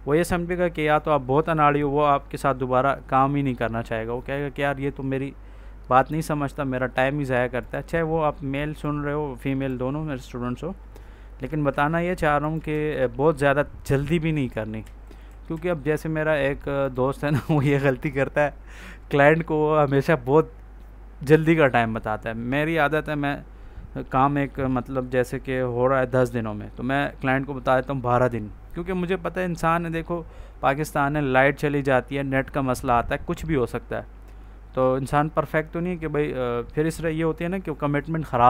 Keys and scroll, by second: 11.5 ctrl+z, 14.7 Down, 15.2 Left, 15.4 Down, 17.7 ctrl+s.